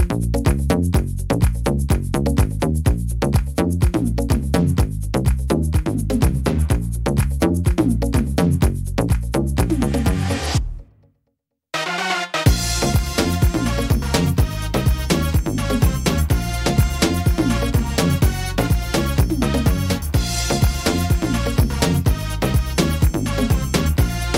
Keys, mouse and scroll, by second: 0.0 right click, 0.5 middle click, 0.9-1.4 scroll up 4, 1.4 shift+middle click, 2.5 e, 4.0 click, 6.2 shift+e, 7.6 click, 8.7 middle click, 10.7 click, 11.9 middle click, 12.4-12.9 scroll down 2, 12.7 middle click, 13.6 shift+e, 15.9 click, 17.1 right click, 17.5 shift+e, 18.5 click, 19.5 middle click, 20.7 right click, 21.3 shift+right click, 22.3 shift+e, 24.3 click.